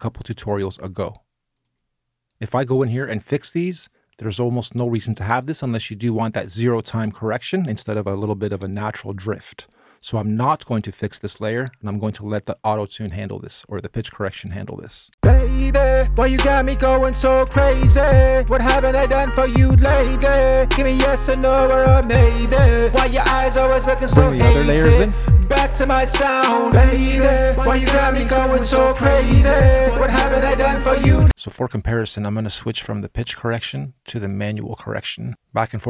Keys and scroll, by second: 14.9 space.